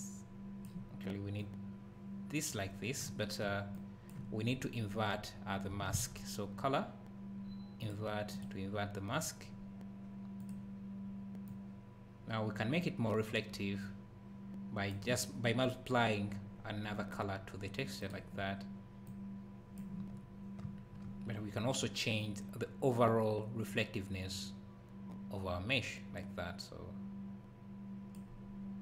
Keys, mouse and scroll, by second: 3.1 `, 3.7 click, 3.8 click, 5.9 shift+a, 8.4 click, 18.0 click, 20.6 `, 22.2 click.